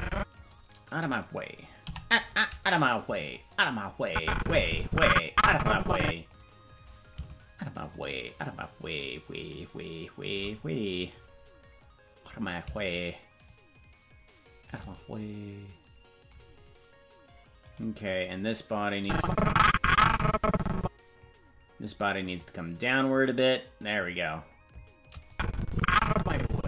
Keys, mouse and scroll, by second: 4.0-6.3 drag, 4.0 i, 7.9-10.3 shift+drag, 11.1 right click, 13.4-14.7 shift+drag, 17.7 right click, 19.0-21.2 drag, 22.3-24.0 drag, 25.3-26.6 drag.